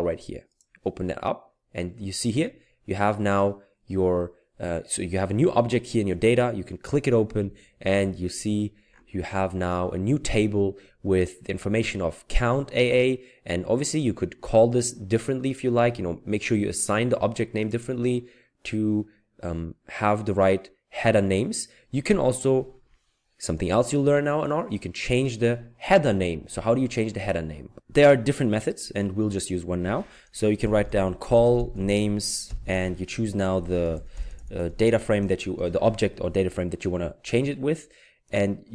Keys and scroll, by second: 30.6-32.4 typing, 33.8-35.6 typing.